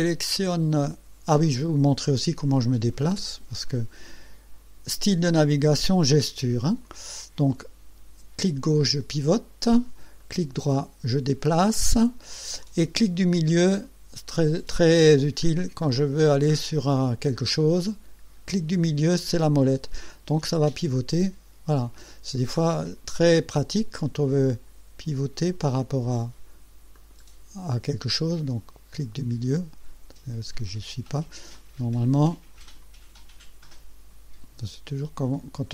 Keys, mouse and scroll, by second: 2.5-3.5 drag, 3.7 right click, 6.9 click, 7.6-10.1 drag, 10.3-12.0 right drag, 12.1-12.8 drag, 13.5 right click, 18.8 middle click, 20.1-22.2 drag, 22.4 right click, 23.1 click, 25.2 click, 27.2 middle click, 27.3 click, 30.6 middle click, 31.6-33.0 drag, 35.4 click.